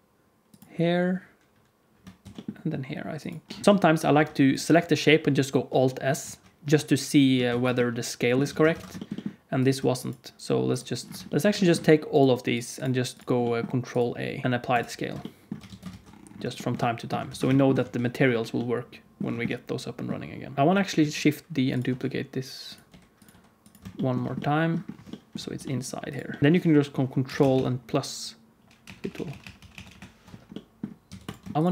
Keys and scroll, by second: 2.2 shift+d, 3.6 alt+s, 3.6 ctrl+z, 3.6 alt+a, 4.1 ctrl+s, 6.1 alt+s, 7.4 ctrl+z, 8.4 alt+a, 8.7 ctrl+s, 14.4 ctrl+a, 15.6 alt+a, 15.9 ctrl+s, 17.2 ctrl+s, 17.7 z, 20.5-23.2 typing, 25.5 g, 26.4 Tab, 27.2 ctrl+KP_Add, 28.0-30.1 ctrl+KP_Add, 31.0 x.